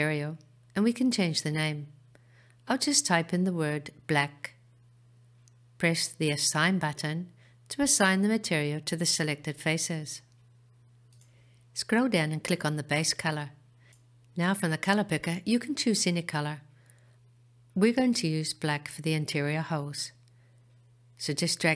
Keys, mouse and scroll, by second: 7.7 click, 9.4-10.3 scroll down 5, 12.9 click.